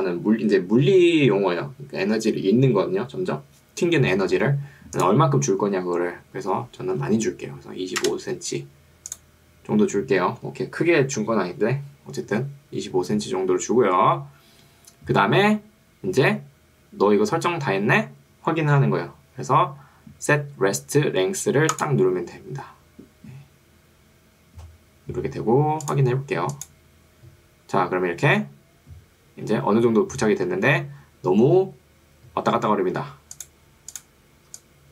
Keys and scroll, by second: 7.0 typing, 8.2 Return, 34.6 3.